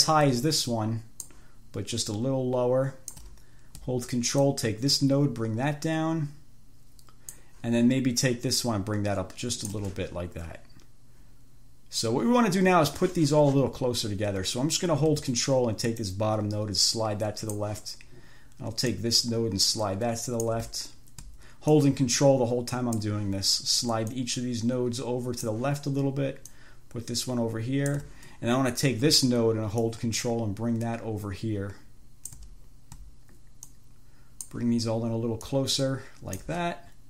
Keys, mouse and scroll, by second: 0.9 ctrl+click, 2.4-3.7 ctrl+drag, 4.7-7.9 ctrl+drag, 8.9-10.2 ctrl+drag, 16.3-18.1 ctrl+drag, 19.1-20.9 ctrl+drag, 21.9-23.5 ctrl+drag, 24.3-25.9 ctrl+drag, 26.7-28.4 ctrl+drag, 30.1-32.8 ctrl+drag, 33.9-34.9 ctrl+drag, 35.7-36.9 ctrl+drag.